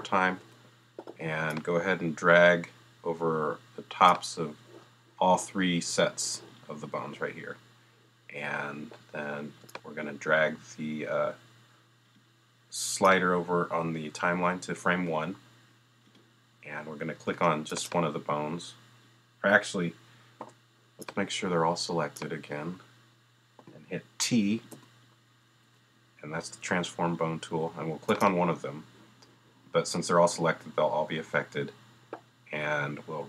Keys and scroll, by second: 20.4 b, 24.7 t.